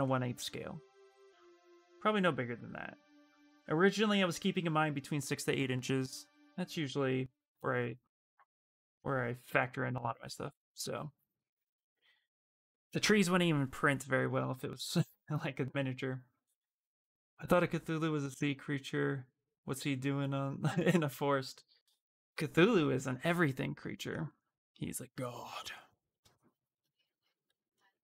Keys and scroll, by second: 27.2 w.